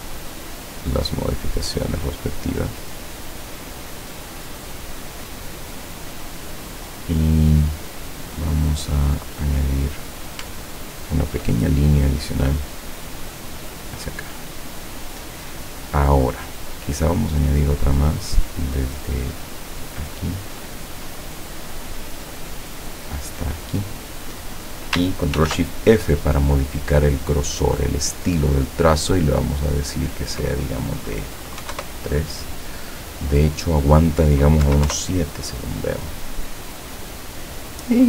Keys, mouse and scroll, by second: 9.3 click, 10.8-11.3 ctrl+scroll up 2, 12.7 click, 14.3 click, 20.0 click, 22.8 click, 25.4 ctrl+shift+f, 27.9 click, 29.1 click, 31.7 KP_3, 31.8 KP_Enter, 33.6 click, 34.7 KP_7, 34.9 KP_Enter.